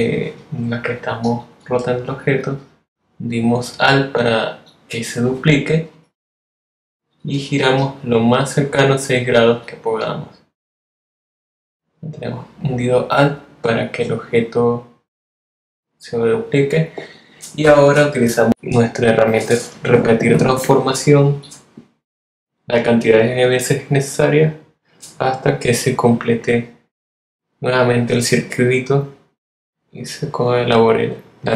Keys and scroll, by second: 16.3 super+d, 18.0 super+d.